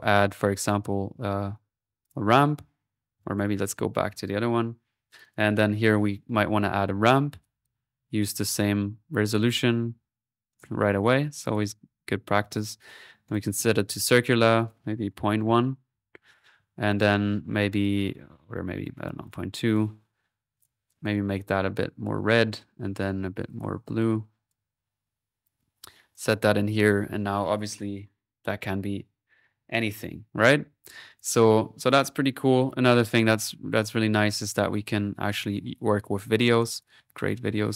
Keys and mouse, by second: 0.0-0.9 typing, 0.7 click, 2.1 click, 3.3 Delete, 3.4 middle click, 5.1-8.4 drag, 8.5 click, 9.3 click, 10.5 click, 11.0 click, 12.5-14.3 drag, 14.6 click, 16.9 click, 17.1 middle click, 18.9-20.4 drag, 20.6-22.9 drag, 23.0-24.8 drag, 24.8 middle click, 25.5 click, 26.7 click, 30.7 middle click, 31.0 click, 32.6 click, 34.4 click.